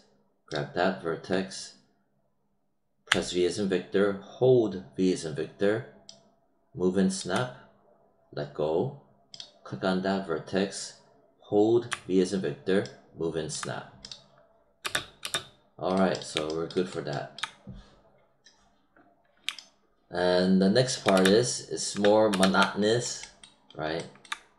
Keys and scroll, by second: 3.0 v, 14.7 space, 21.0 space.